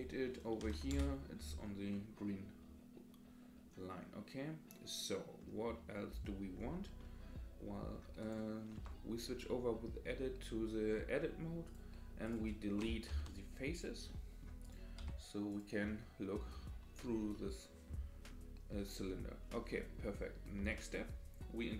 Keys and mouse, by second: 0.0-1.5 drag, 1.9-5.4 middle drag, 7.0 middle click, 8.8 Tab, 11.7 click, 13.1 Delete, 14.1 middle click, 14.6 click, 15.0 Delete, 15.9 middle click, 17.3 middle click, 19.8 middle click, 20.6 Tab.